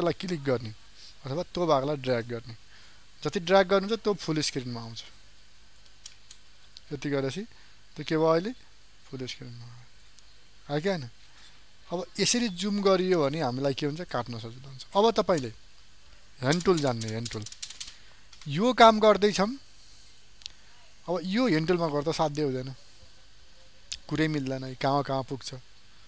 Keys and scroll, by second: 6.4 ctrl+space.